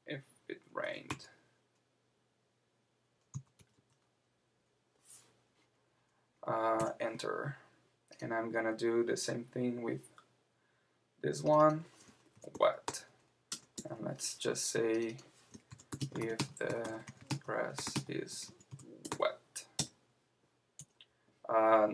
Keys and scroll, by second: 6.8 Return, 13.5 Return, 13.7 Tab, 19.8 Return.